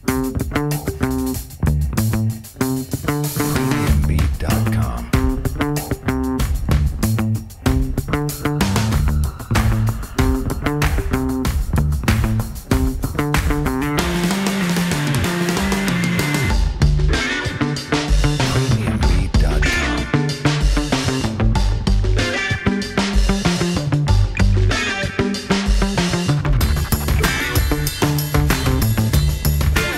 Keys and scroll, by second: 0.0 F3, 2.8 F3, 11.7 F3, 14.8 F3, 18.0 w, 18.7 alt+x, 19.9 2, 20.2 F4, 24.0 Delete, 25.0 alt+x.